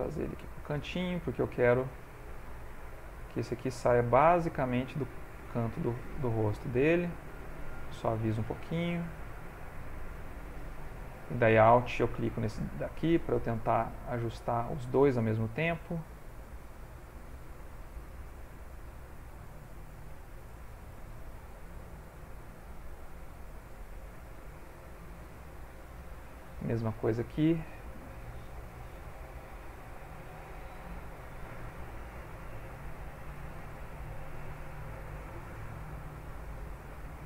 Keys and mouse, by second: 1.7 middle click, 2.6 middle click, 2.8 click, 4.9 click, 5.5 middle click, 7.4 shift+click, 8.0 shift+click, 8.4 click, 9.5 middle click, 11.7 alt+click, 13.1 middle click, 14.1 click, 16.4 alt+click, 18.0 click, 19.4 click, 19.9 click, 20.2 middle click, 21.6 alt+click, 23.5 middle click, 24.5 ctrl+middle click, 24.9 middle click, 25.9 ctrl+middle click, 26.9 click, 27.6 ctrl+middle click, 28.9 g, 30.2 ctrl+Tab, 31.6 click, 33.3 click, 33.7 click, 34.1 click, 34.6-35.6 shift+click, 35.4 click, 35.8 click, 36.7 shift+click, 37.0 click.